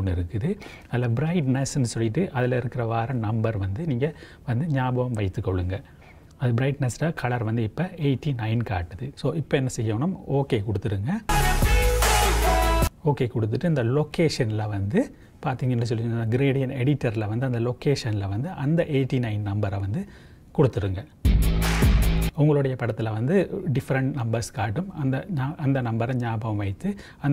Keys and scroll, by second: 5.2 j, 15.3 j, 15.9 j, 19.2 KP_8, 19.4 KP_9.